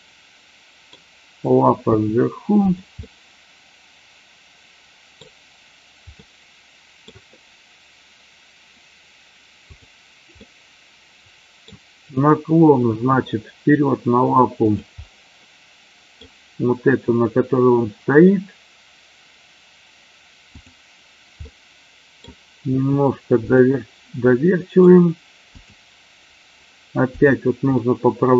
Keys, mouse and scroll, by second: 1.8 g, 2.9-5.2 middle drag, 6.2 middle click, 10.4-11.6 middle drag, 12.9 r, 15.0-16.2 middle drag, 20.5 click, 21.5 middle click, 22.6 r, 24.4 middle click, 25.6 click, 27.6-28.3 middle drag.